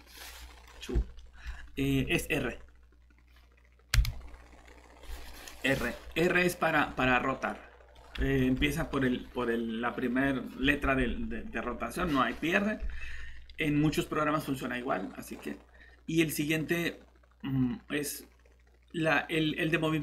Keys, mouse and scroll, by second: 0.1 middle click, 3.9 shift+r, 6.7 Escape.